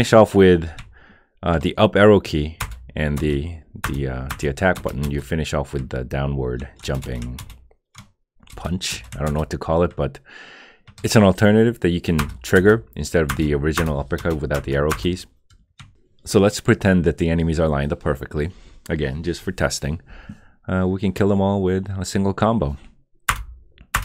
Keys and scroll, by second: 2.6 Return, 3.2 Return, 3.8 Return, 4.8 Return, 6.8 Return, 7.4 Return, 8.5 Return, 9.3 Return, 12.2 Return, 13.3 Return, 14.2 Return, 14.9 Return, 23.3 Return, 23.9 Return.